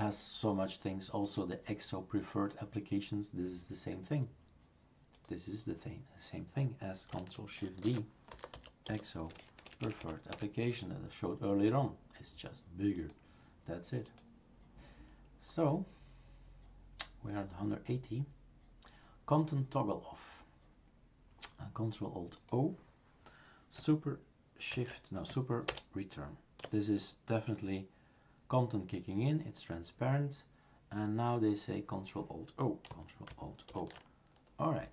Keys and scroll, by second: 7.8 shift+super+d, 25.7 super+Return, 33.7 ctrl+alt+o.